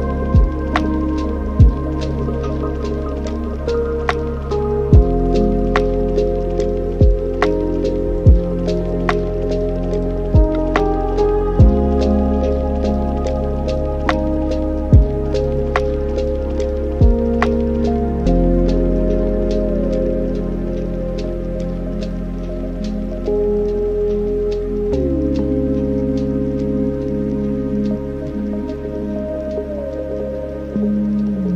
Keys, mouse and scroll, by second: 0.7 click, 1.4-2.6 middle drag, 2.6-5.3 drag, 5.3 scroll down 3, 5.5-5.9 scroll up 1, 5.9-6.5 scroll down 9, 6.5-8.4 middle drag, 8.4 click, 9.7 drag, 11.3 click, 13.0-14.0 middle drag, 14.0 n, 15.3 click, 16.3 click, 16.9 click, 17.1-20.1 drag, 25.2-25.8 drag, 26.2-27.7 middle drag, 27.7-28.5 scroll up 1, 28.5-29.4 scroll up 1, 29.4-31.5 drag.